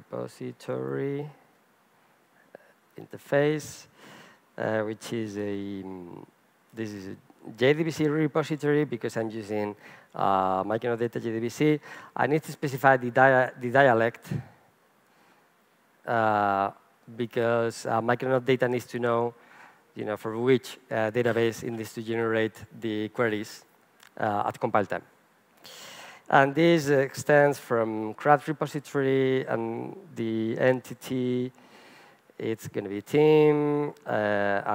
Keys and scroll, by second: 8.9 Return, 27.5 Return, 33.2 Return.